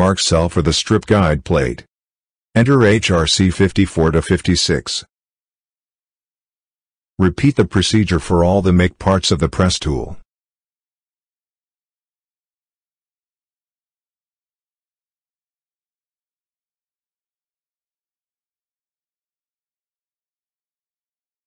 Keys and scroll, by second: 0.5 ctrl+v, 1.5 BackSpace, 3.0 BackSpace, 5.5 ctrl+c, 8.0 a, 8.9 ctrl+v, 10.0 ctrl+v, 10.6 a, 11.7 ctrl+v, 12.9 ctrl+v, 13.9 a, 14.9 ctrl+v, 16.1 a, 16.2 2, 17.1 ctrl+v, 20.2 shift+Left.